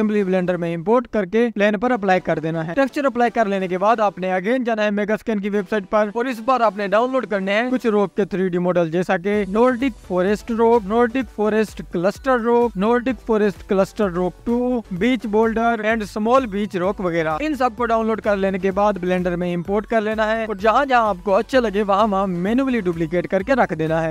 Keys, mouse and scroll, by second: 0.4 scroll down 1, 0.4-5.2 drag, 0.6 scroll up 1, 4.1 scroll up 2, 5.2-5.7 scroll down 1, 6.2-6.6 scroll up 1, 7.9-9.6 drag, 9.6-10.4 scroll up 1, 10.6-11.2 scroll up 10, 11.7 click, 15.0-19.7 drag, 19.7 shift+s, 22.2 click, 22.4 click, 22.5 s, 22.9-23.5 scroll up 1, 23.5 click, 23.7-24.1 scroll down 6.